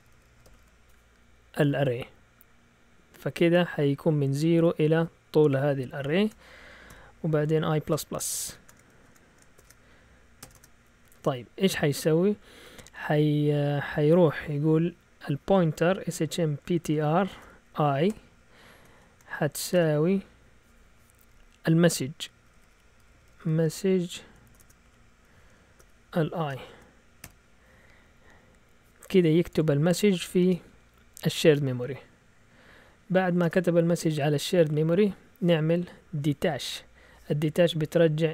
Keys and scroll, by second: 0.0-1.0 typing, 6.1 shift+Tab, 6.8-11.0 typing, 15.7-20.2 typing, 22.2-27.6 typing, 32.6 Down, 33.3 typing.